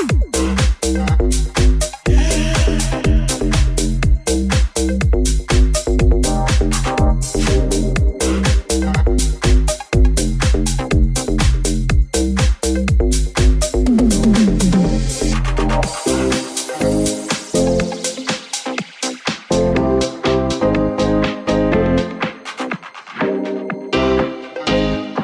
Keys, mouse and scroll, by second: 1.2 right click, 1.6 right click, 2.7 right click, 2.8 middle click, 3.3 right click, 3.4-5.2 middle drag, 3.6 Tab, 5.2 alt+right click, 5.3 alt+middle click, 5.6 click, 5.7-10.3 middle drag, 6.0 alt+z, 8.2 alt+z, 9.6 alt+z, 10.3 alt+right click, 10.4-19.6 alt+middle drag, 10.7 alt+z, 11.5 g, 19.6 shift+middle click, 20.0 shift+middle click, 20.2 shift+middle click, 20.6 shift+middle click, 20.9-25.2 middle drag.